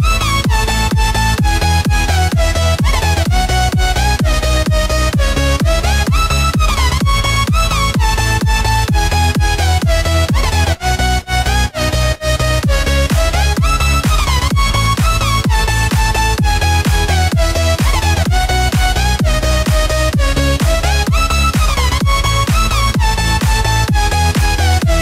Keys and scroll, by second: 14.7 ctrl+g, 17.7 ctrl+e.